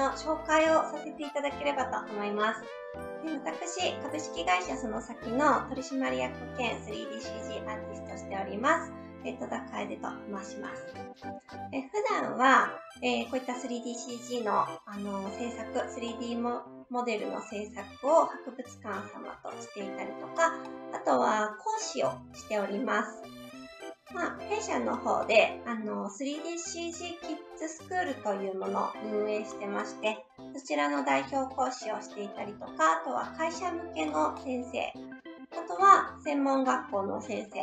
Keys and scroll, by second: 10.8 Right.